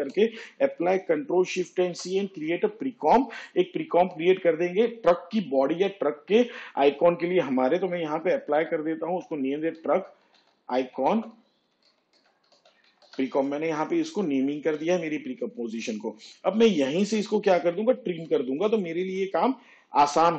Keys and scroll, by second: 0.1 ctrl+z, 4.2 ctrl+shift+c, 10.7-16.2 typing.